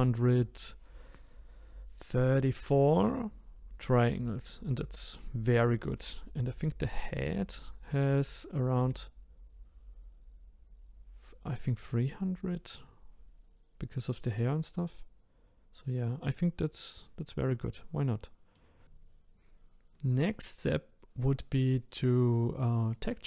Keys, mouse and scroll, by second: 4.3 middle click, 5.0 scroll down 2, 5.5-6.1 scroll up 1, 6.1-11.7 middle drag, 12.5-17.5 middle drag, 18.8-21.0 shift+middle drag.